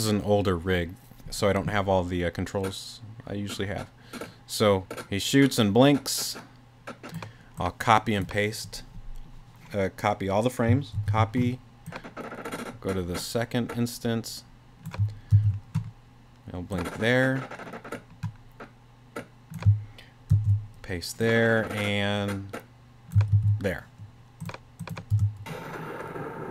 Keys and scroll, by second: 11.0 super+c, 15.3 super+v, 20.3 super+v, 23.3 super+v, 25.1 space.